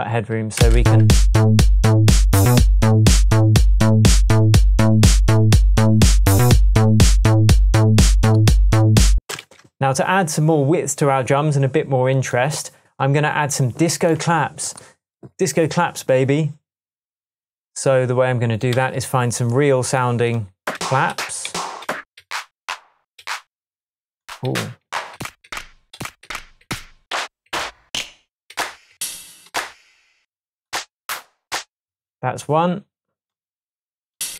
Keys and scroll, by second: 0.8 space, 9.2 space, 9.4 super+s, 18.7 Right, 20.7 Up, 21.1 Up, 21.5 Down, 22.2 Down, 23.2 Up, 24.5 Down, 25.1 Down, 25.9 Up, 26.2 Down, 27.2 Down, 27.9 Down, 28.5 Down, 29.5 Up, 31.0 Down, 31.5 Up.